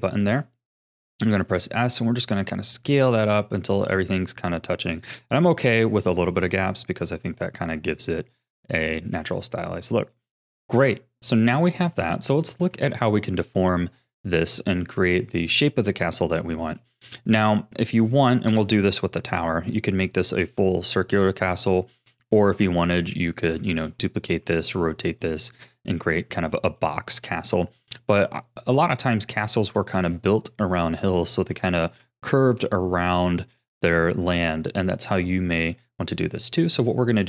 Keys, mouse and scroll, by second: 1.3 s, 5.2-6.1 scroll down 5, 6.1 middle click, 6.6 Tab, 7.4 a, 7.7-12.4 middle drag, 12.4 ctrl+s, 15.2-16.8 drag, 16.8-18.5 middle drag, 18.5 KP_7, 21.6-23.1 shift+middle drag, 23.1 click, 23.6 shift+d, 24.4 r, 25.6 x, 26.5-29.5 shift+middle drag, 31.5-35.2 shift+middle drag, 35.2 click, 36.5 click.